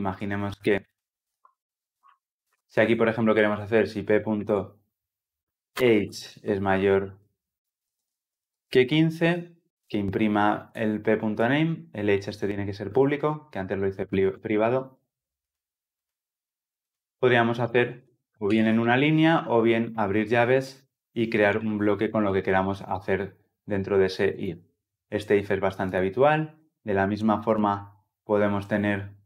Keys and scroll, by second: 14.2 Delete, 18.3 Delete, 18.3 ctrl+alt+l, 18.5 ctrl+alt+o, 22.0 ctrl+alt+l.